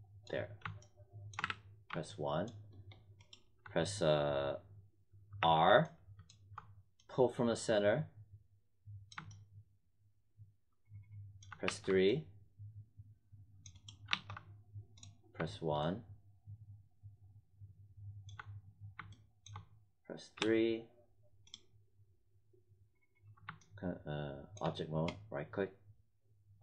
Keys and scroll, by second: 1.3 w, 5.3 r, 11.6 3, 14.0 1, 20.2 3.